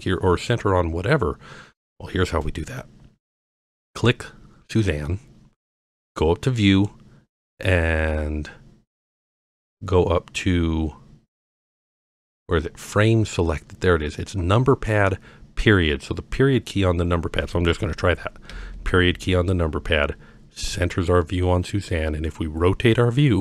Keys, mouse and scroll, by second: 3.7 click, 6.7-16.7 drag, 18.5 KP_Decimal, 19.9-21.7 middle drag, 22.3-23.4 middle drag.